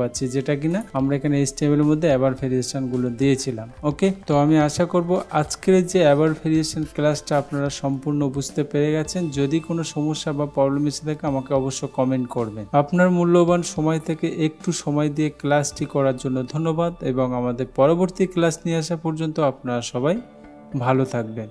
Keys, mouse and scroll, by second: 0.9 click.